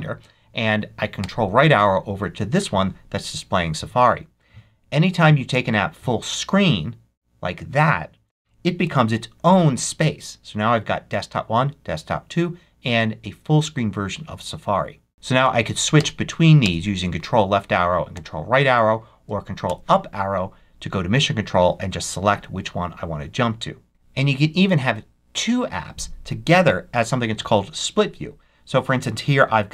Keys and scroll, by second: 1.1 ctrl+Right, 8.8 ctrl+Up, 15.9 ctrl+Left, 17.7 ctrl+Right, 19.6 ctrl+Up.